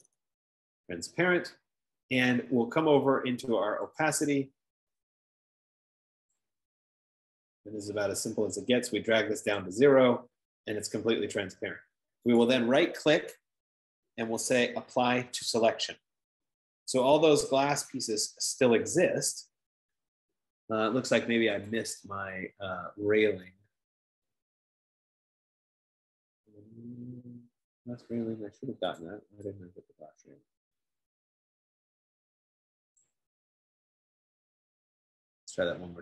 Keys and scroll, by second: 0.0-1.1 typing, 6.4 F15.